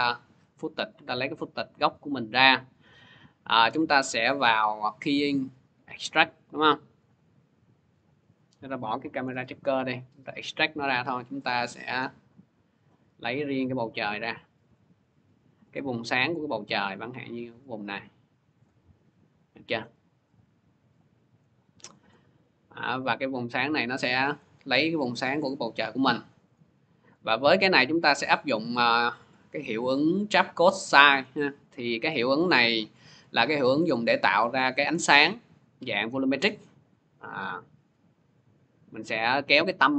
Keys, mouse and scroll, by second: 0.2 middle click, 1.8 click, 1.8 scroll, 2.8 click, 5.8 click, 8.3 click, 9.0 Delete, 10.0 click, 18.4 click, 20.2 click, 20.8 click, 25.3 click, 26.3 click, 26.9 click, 28.3 click, 31.0 click.